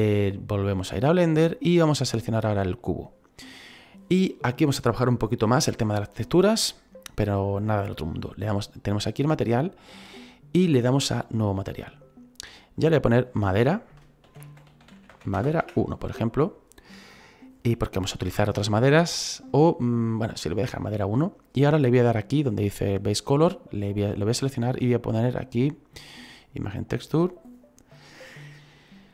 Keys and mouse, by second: 0.6 click, 1.9 right click, 11.2 click, 12.7 click, 14.2-15.6 typing, 23.6 click, 26.5 click.